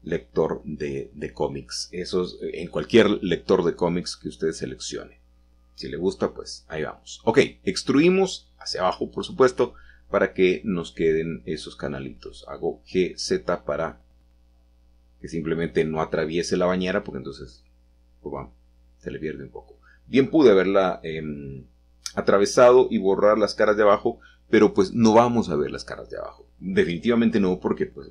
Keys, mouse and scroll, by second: 0.8 shift+click, 2.4 shift+click, 3.2-5.3 scroll down 1, 5.0-5.5 middle drag, 5.7 middle click, 6.1 middle click, 6.6 middle click, 7.3 e, 9.1 click, 9.4 Tab, 9.9-10.6 scroll down 1, 12.2-14.3 middle drag, 16.7 shift+click, 17.7 middle click, 17.9-18.9 middle drag, 18.3 Tab, 20.3-21.7 middle drag, 22.0 shift+middle click, 22.8-24.1 scroll down 1, 24.1 middle click, 25.8-26.4 middle drag, 27.2-28.1 middle drag.